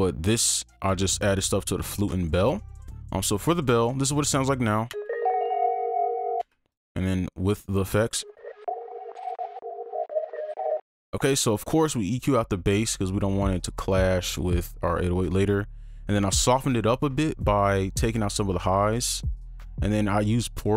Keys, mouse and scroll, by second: 4.9 space, 10.8 space.